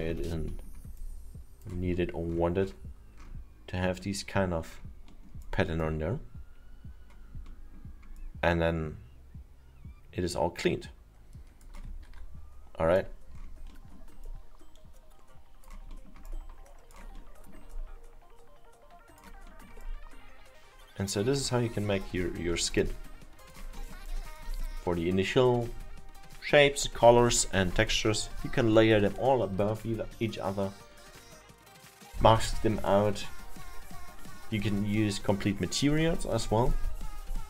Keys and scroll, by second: 12.1 F2.